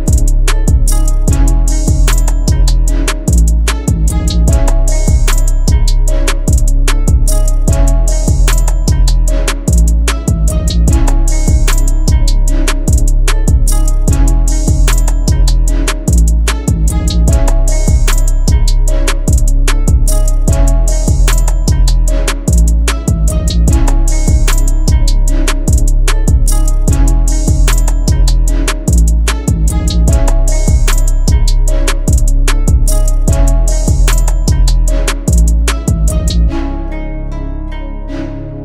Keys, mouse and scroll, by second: 5.8 double click, 12.0 double click, 13.8-14.5 ], 16.1 double click, 17.3 [, 17.4 [, 17.9 [, 18.8 double click, 29.2 double click.